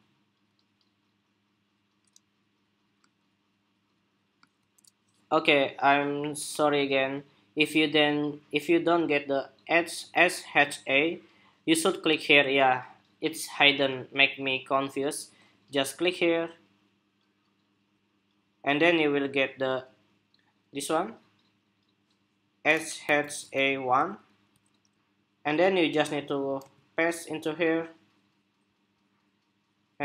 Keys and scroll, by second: 4.7 shift+super+2, 22.8 super+c, 26.3 super+v.